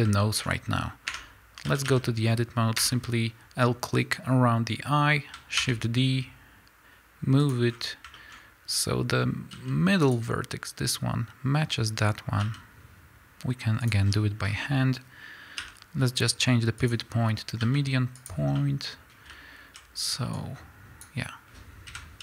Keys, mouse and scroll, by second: 0.2 shift+middle click, 1.1 Tab, 1.7 a, 2.8 l, 5.6 shift+d, 7.5 click, 7.7-9.5 scroll up 5, 8.2 shift+middle click, 9.5 g, 9.7 middle click, 10.1 click, 12.4 g, 13.9 click, 14.1 scroll down 1, 16.9 ., 17.6 s, 18.6-20.4 middle drag, 19.8 z, 20.4-22.2 drag, 21.9 KP_1.